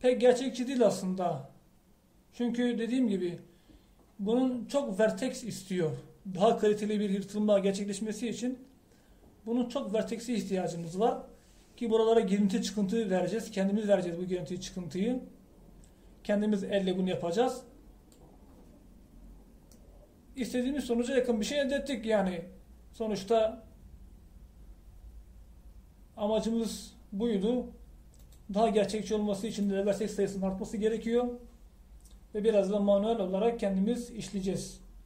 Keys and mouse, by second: 0.3-2.0 drag, 18.8 middle click, 20.5 middle click, 29.4-35.0 drag.